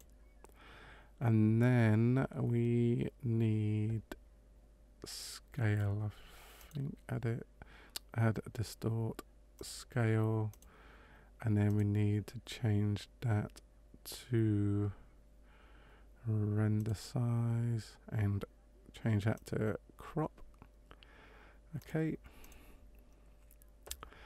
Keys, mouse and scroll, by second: 22.4 click.